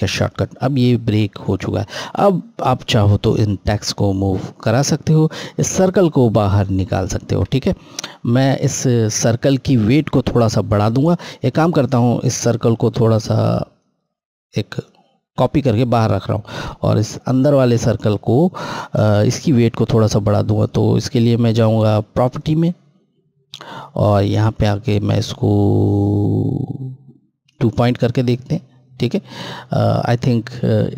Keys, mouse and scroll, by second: 1.3 Left, 6.9 click, 7.2 z, 12.2 click, 13.5 right click, 16.6 click, 22.1 click, 27.3 Left, 27.3 click.